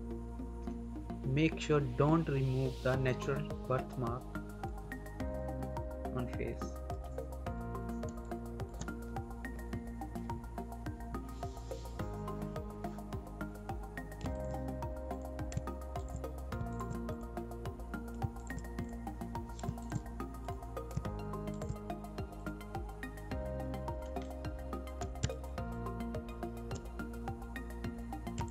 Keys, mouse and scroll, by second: 4.6 ctrl+scroll down 1, 4.7 ctrl+-, 5.9 ctrl+=, 6.9-7.2 scroll down 1, 8.0 space, 8.2 click, 8.5 space, 14.1 alt+space, 14.2 alt+click, 18.1 alt+click, 19.5 alt+click, 20.8 alt+click, 22.6 scroll down 1, 23.3 scroll up 1, 24.1 click, 25.1 space, 25.2 click, 26.2 space, 28.4 alt+click.